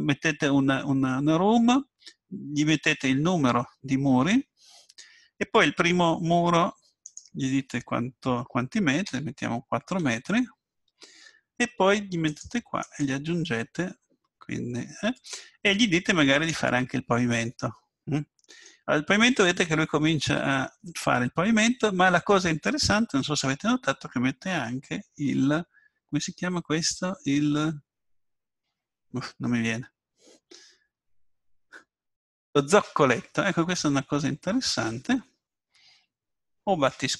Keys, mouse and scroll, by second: 7.1-8.9 drag, 12.8-14.8 drag, 16.3-18.3 drag, 17.2-19.6 middle drag, 21.8-29.8 middle drag.